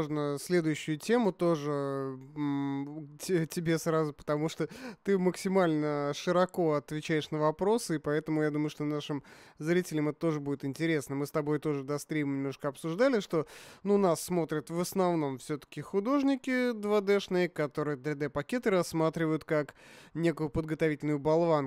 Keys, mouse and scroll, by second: 0.9 shift+z, 1.3-4.0 middle drag, 4.4-6.1 drag.